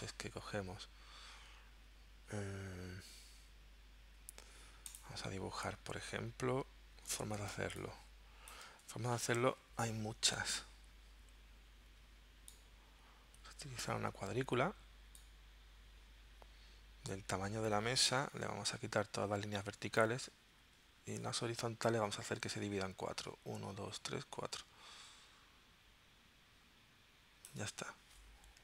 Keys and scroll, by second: 7.6 space, 8.9 v, 18.3 Left, 20.5 Down.